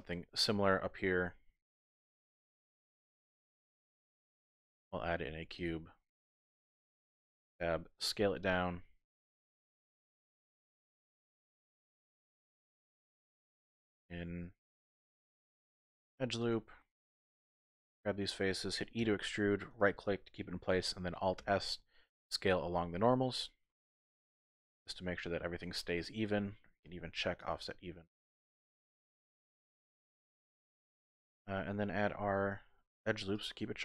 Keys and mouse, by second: 1.6 KP_1, 3.3 shift+click, 4.5 shift+a, 7.2 Tab, 8.2 s, 10.2 click, 11.1-12.3 drag, 12.5 Tab, 13.5 ctrl+r, 14.4 Tab, 14.8 ctrl+r, 16.4 click, 17.2 3, 18.0 alt+click, 19.0 e, 19.7 click, 21.4 alt+s, 24.6 click, 24.9 middle click, 25.2 click, 25.2 typing, 27.4 click, 28.4-30.5 drag, 30.5 middle click, 30.8 click, 32.9 ctrl+r.